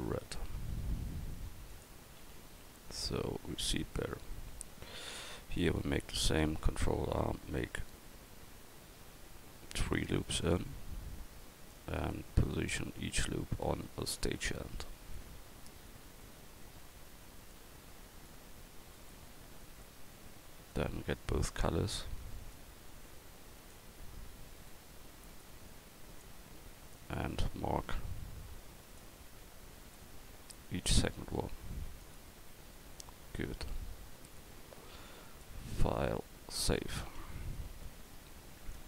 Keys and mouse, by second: 2.2 a, 2.5 click, 2.9 Tab, 3.8-4.9 right drag, 4.9 Tab, 6.7 ctrl+r, 12.0 right click, 12.8-13.8 middle drag, 13.8-16.0 right drag, 16.0-17.1 drag, 18.9 right click, 19.3 click, 19.6-20.7 middle drag, 22.4-27.2 drag, 27.3-28.9 drag, 28.9-30.8 middle drag, 30.8-32.1 drag, 32.1 middle click, 32.5 Tab, 33.2-35.3 drag.